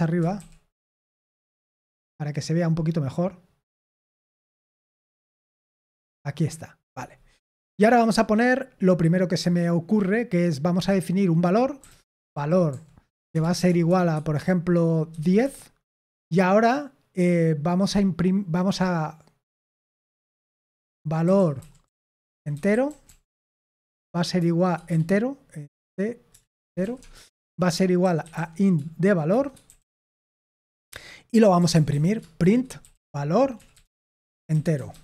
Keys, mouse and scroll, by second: 0.1 typing, 4.2-5.8 typing, 7.3 Tab, 11.5-15.8 typing, 21.0-24.8 typing, 26.1-35.0 typing.